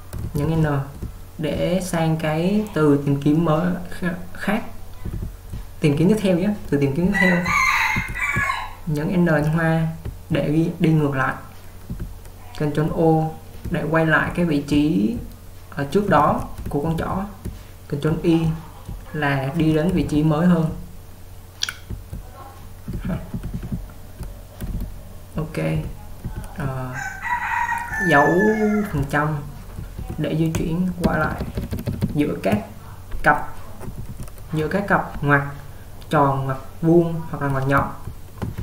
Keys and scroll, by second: 0.0-1.5 typing, 4.4 typing, 7.1-7.5 typing, 24.2 typing, 38.0-38.6 typing.